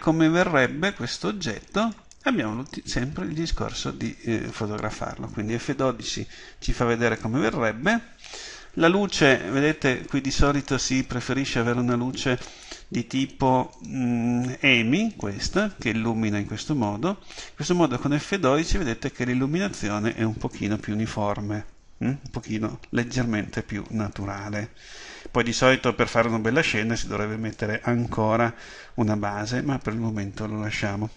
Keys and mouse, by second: 5.8 F12, 10.6-12.3 right drag.